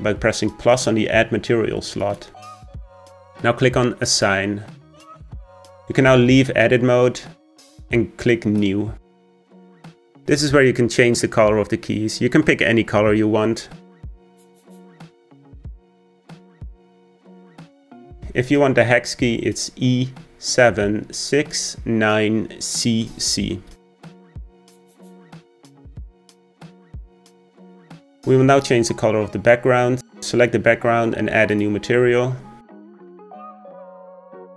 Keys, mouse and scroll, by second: 2.0-6.2 drag, 6.2 Tab, 8.3-10.4 drag, 16.8 click, 25.9 scroll down 1, 27.0 click, 31.5-34.5 drag.